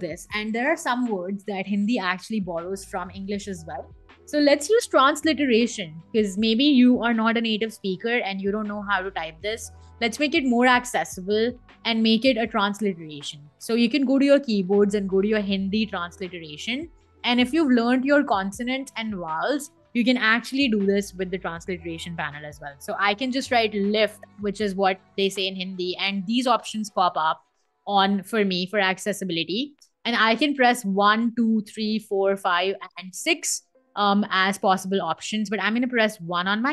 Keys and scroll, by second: 4.1 BackSpace, 23.2 l, 23.5 i, 24.5 f, 24.7 t, 35.6 1.